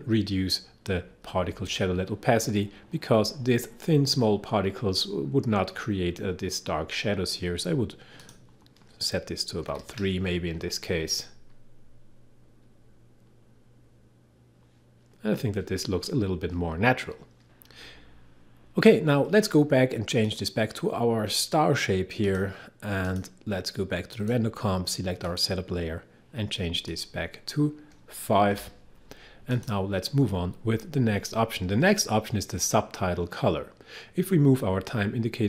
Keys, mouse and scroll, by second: 8.2 click, 9.7 3, 17.4 click, 20.3 click, 28.5 5, 29.5 click.